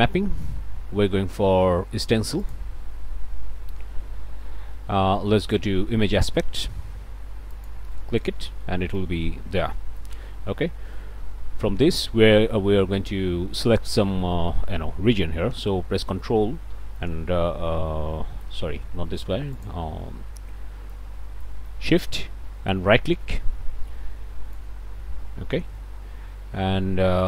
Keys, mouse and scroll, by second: 2.4 click, 3.0-4.1 drag, 4.1 middle click, 7.5 click, 9.0-10.2 right drag, 10.9-12.2 right drag, 17.0-18.6 ctrl+middle drag, 19.5 click, 19.7 0, 20.0 Return, 20.9 right click, 23.7-24.8 shift+right drag, 25.8 right click, 26.4-27.2 middle drag.